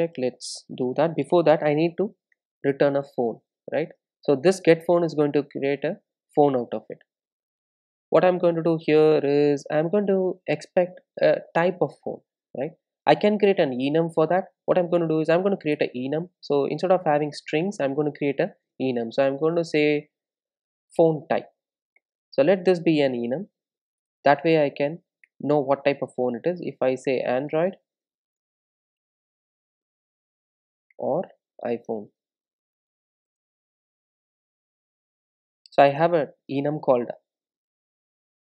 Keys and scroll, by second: 2.3 Return, 14.9 super+n, 24.0 Return, 34.8 super+s.